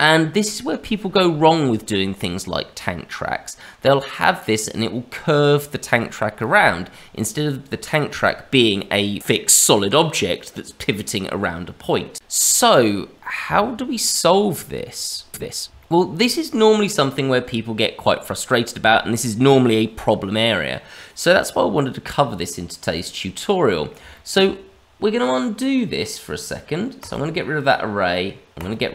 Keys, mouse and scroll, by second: 2.8-5.1 scroll up 3, 11.9-13.4 scroll down 2, 15.4 shift+middle click, 22.9 middle click, 24.1 shift+middle click, 27.0 click, 28.5 click.